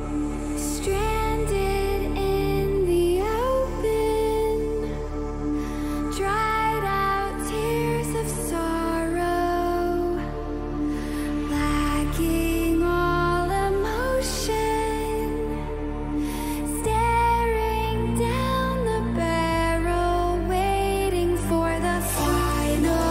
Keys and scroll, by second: 18.2 ctrl+t.